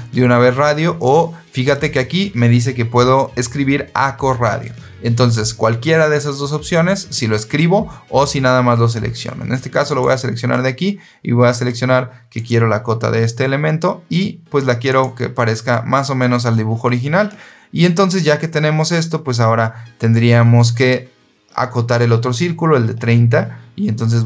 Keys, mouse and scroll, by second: 9.8 click, 12.3 click, 14.8 click.